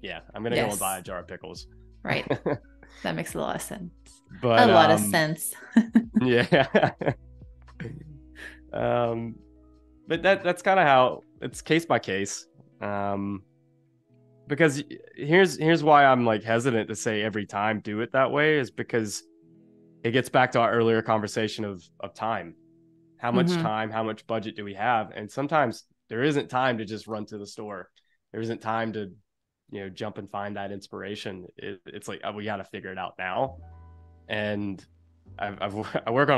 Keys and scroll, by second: 2.9 space, 10.1 space, 30.7 space, 34.3 -, 34.9 a, 36.1 super+z.